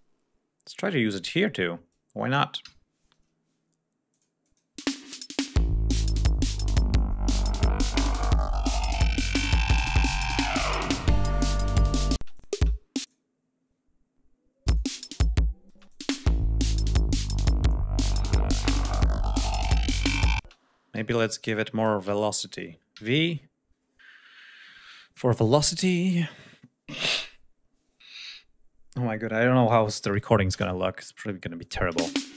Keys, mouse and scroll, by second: 2.3 ctrl+v, 3.8 click, 4.1 click, 4.5 space, 5.9-6.6 ctrl+scroll down 3, 11.9 space, 12.0 click, 12.7 click, 14.3 click, 15.4 space, 15.6 click, 20.1 space, 20.7 g, 20.8 click, 21.2 e, 21.5 ctrl+click, 21.7 ctrl+a, 22.6 v, 29.3 1, 29.3 2, 29.8 7, 30.2 Return.